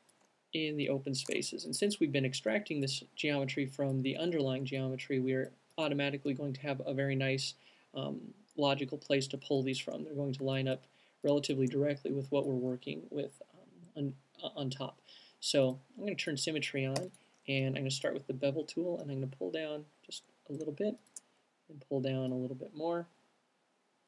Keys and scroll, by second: 17.1 b, 17.6 alt+b.